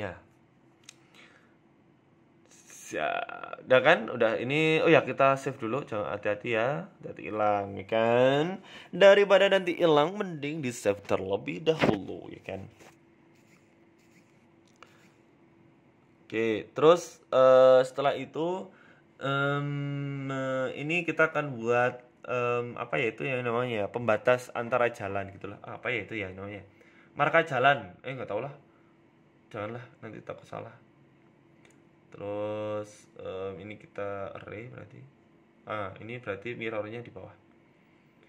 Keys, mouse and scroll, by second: 0.2 middle click, 0.5 scroll down 5, 0.7 Tab, 1.1 middle click, 2.3 scroll up 4, 2.5 middle click, 3.0 ctrl+s, 11.2 KP_1, 12.6 z, 13.6 shift+a, 15.6 g, 18.9 shift+a, 20.4 scroll up 2, 20.7 s, 21.8 s, 23.0-23.4 scroll up 3, 23.2 shift+middle click, 25.5 click, 28.1 Tab, 28.4 g, 30.8 shift+middle click, 31.1 s, 31.9 s, 33.0 shift+middle click, 33.3 scroll down 2, 33.7 scroll up 1, 35.2 click, 36.5-38.1 scroll down 6, 38.1 click.